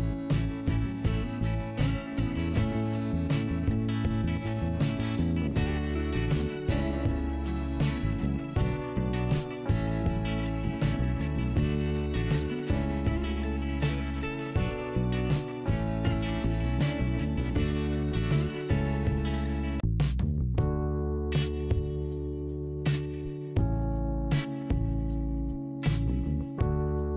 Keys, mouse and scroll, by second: 1.4 click, 2.9 click, 7.3 click, 8.1-8.9 scroll down 1, 8.9 scroll up 1, 13.5 click, 14.7 click, 18.3 click, 18.4 click, 19.1 scroll up 1, 19.8 5, 22.0 click, 22.4 click, 23.5 scroll up 1, 24.2 click, 25.9 click.